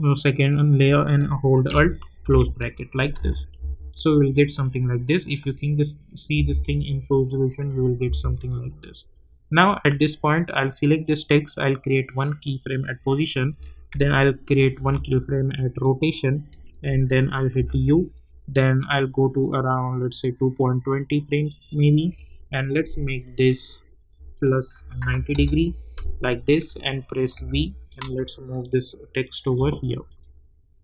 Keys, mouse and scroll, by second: 2.2 alt+], 3.1 space, 3.9 click, 6.6 space, 9.0-10.5 drag, 14.8 r, 15.8 click, 17.5 u, 18.9-24.3 drag, 25.3 Return, 27.6 v, 27.9-30.1 drag.